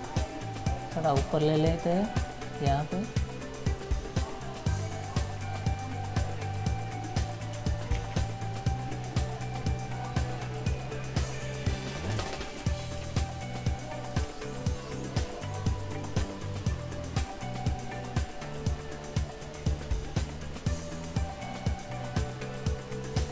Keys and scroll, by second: 8.1 ctrl+z.